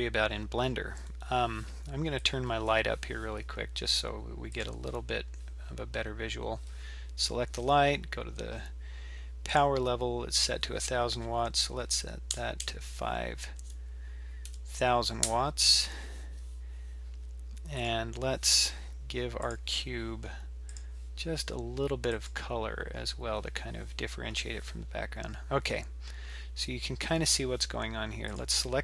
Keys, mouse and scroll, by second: 2.2 click, 4.5 click, 9.5-12.3 drag, 12.3 KP_0, 17.8 click, 19.4 click, 20.7 click, 28.3 click.